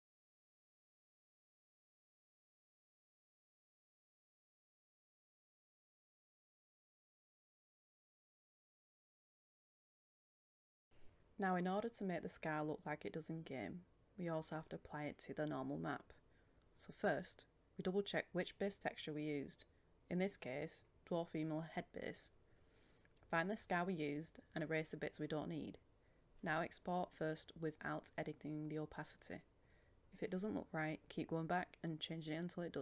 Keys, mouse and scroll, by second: 11.1 Tab, 12.3 click, 14.0 scroll down 1, 17.3-18.3 drag, 19.6-23.8 scroll down 1, 23.8 click, 26.1-29.1 scroll up 1, 29.1 click, 30.4 right click, 31.2-32.8 drag.